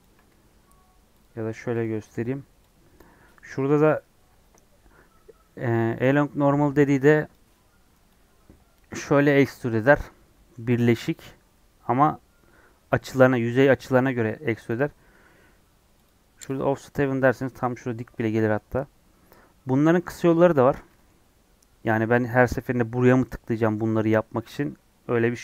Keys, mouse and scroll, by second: 0.0 ctrl+click, 7.3 click, 9.7-15.9 middle drag, 15.9-17.1 drag, 17.1-20.2 middle drag, 20.2 ctrl+z, 20.8-23.0 middle drag, 23.0 click, 24.0 scroll down 1, 24.2-25.4 middle drag.